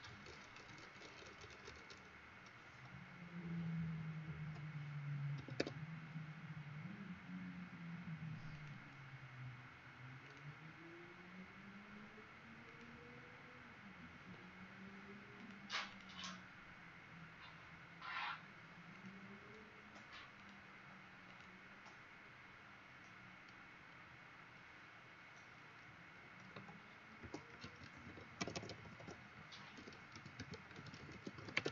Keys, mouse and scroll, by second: 4.4 Delete, 5.3 Escape, 5.6 Escape, 8.5 click, 15.9 click, 18.9 click, 26.9-31.7 typing.